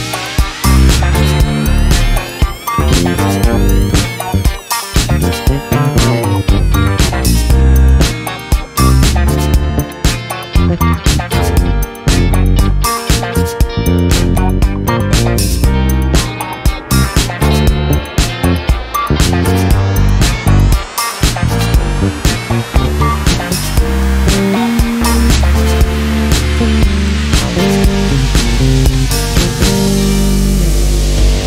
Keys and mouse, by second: 0.3 click, 1.5-3.0 drag, 4.4 ctrl+g, 5.6 space, 6.2 click, 6.7-8.4 drag, 9.1 ctrl+g, 10.0-12.6 typing, 15.0 click, 15.4 click, 18.2 click, 19.5 1, 21.4 BackSpace, 22.0 3, 22.3 Return, 23.8 click, 25.0 2, 25.7 Return, 27.4 click, 28.6 1, 29.5 Return.